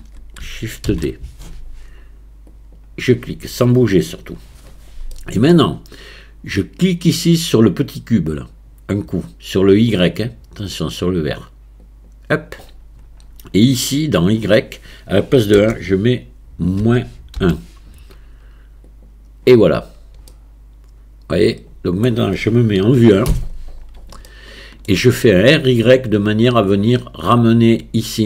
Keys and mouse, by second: 0.9 shift+d, 5.1 middle click, 11.8 click, 14.4-18.9 drag, 20.3-22.0 middle drag, 22.0 middle click, 22.8 KP_1, 24.3-24.9 shift+middle drag.